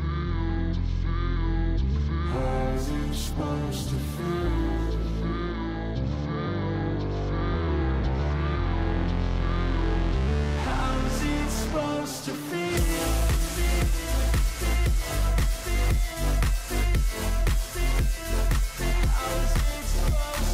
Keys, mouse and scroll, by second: 0.0-0.6 typing, 3.8 p, 4.4 y, 6.2 BackSpace, 6.5 BackSpace, 6.7 BackSpace, 8.9-15.7 typing.